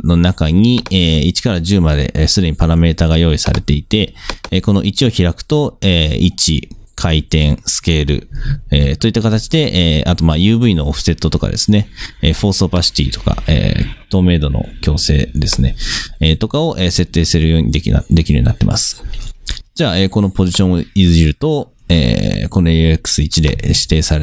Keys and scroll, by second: 23.8 super+z.